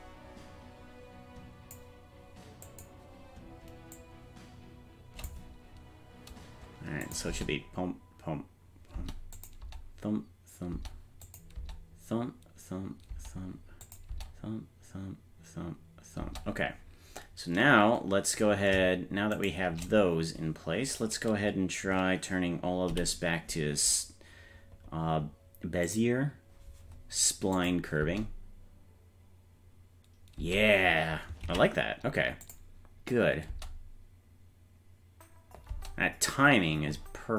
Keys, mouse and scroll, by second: 2.7 click, 4.0-5.3 drag, 7.1 click, 7.3 space, 9.0 space, 9.4 click, 9.6 space, 10.7 space, 11.3 click, 11.6 space, 13.1 space, 13.9 click, 14.1 space, 16.2 space, 19.4 shift+right click, 22.9 t, 27.6 click, 28.0 space, 30.4 space, 31.6 ctrl+s, 32.5 click, 33.5 space, 35.7 space.